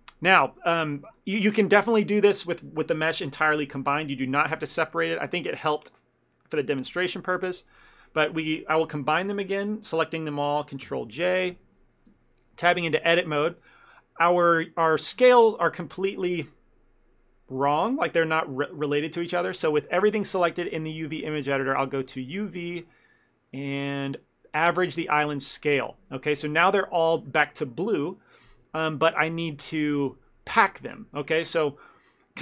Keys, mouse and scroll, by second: 0.0 ctrl+middle click, 0.4 click, 0.6 middle click, 0.9 shift+middle click, 1.1 ctrl+middle click, 1.3 middle click, 4.6 shift+middle click, 5.0 middle click, 7.5 shift+click, 11.4 ctrl+j, 12.2 Tab, 12.6 a, 12.8 a, 13.1 a, 13.6 ctrl+middle click, 20.6 shift+middle click, 22.1 click, 26.5 ctrl+middle click, 31.7 shift+middle click.